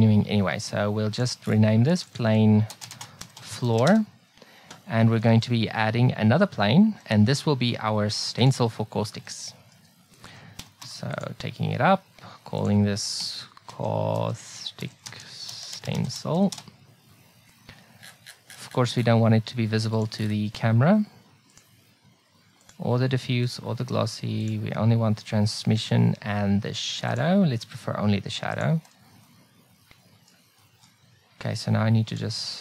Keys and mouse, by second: 1.2-3.6 drag, 3.8 o, 5.3 shift+a, 9.4-11.4 middle drag, 10.6 g, 12.6-13.9 drag, 20.0-26.2 drag, 29.3 middle click, 30.6-32.0 middle drag, 32.1 click.